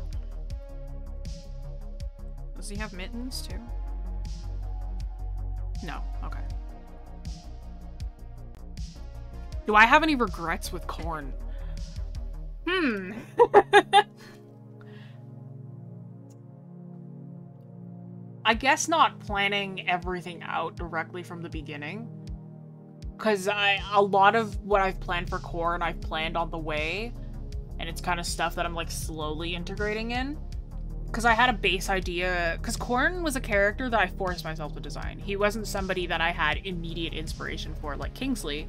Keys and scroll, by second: 0.1 scroll up 1.